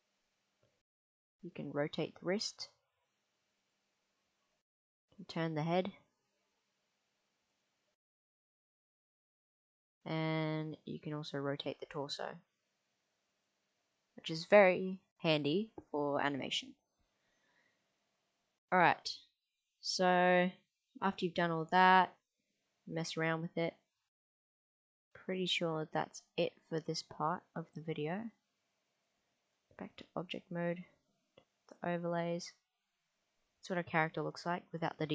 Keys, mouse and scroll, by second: 0.2 click, 1.0 click, 1.6 middle click, 2.3 r, 3.7 click, 5.2 click, 5.5 r, 7.6 click, 9.5 click, 10.4 middle click, 11.5 r, 13.3 click, 14.1-15.7 middle drag, 18.8 click, 19.2 g, 22.7-27.2 middle drag, 28.2-29.4 drag, 29.9 middle click, 31.7 click.